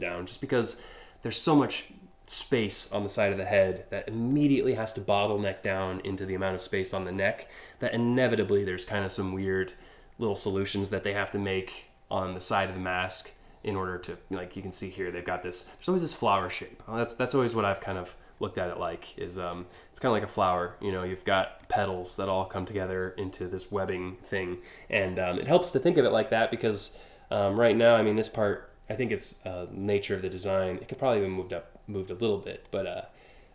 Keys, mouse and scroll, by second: 18.7 click, 30.5 click, 32.2-33.5 drag.